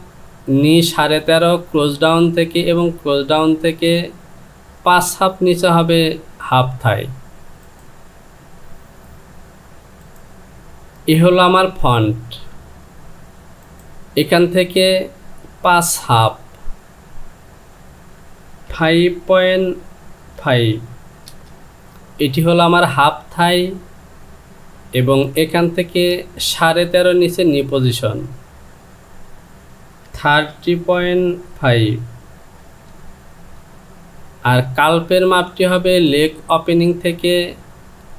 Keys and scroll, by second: 16.8 Down, 20.4 KP_5, 28.5 Down, 31.0 KP_Decimal, 32.7 Return.